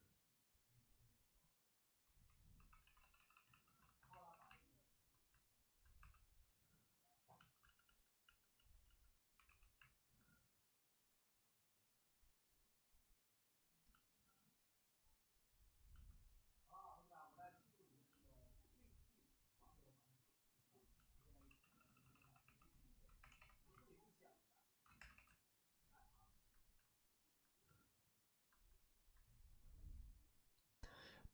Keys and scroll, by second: 2.5-3.4 typing, 3.8 alt+s, 4.2 alt+s, 5.9 2, 7.5 ctrl+z, 7.7 ctrl+z, 8.2 ctrl+z, 8.5 ctrl+z, 8.8 ctrl+z, 9.4 w, 13.8 w, 21.4-23.3 typing, 24.9 2, 25.1 2.